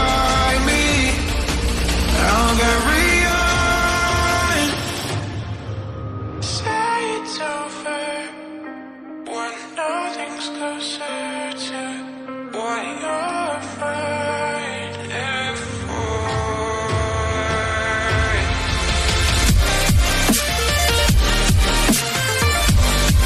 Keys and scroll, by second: 5.2 Delete.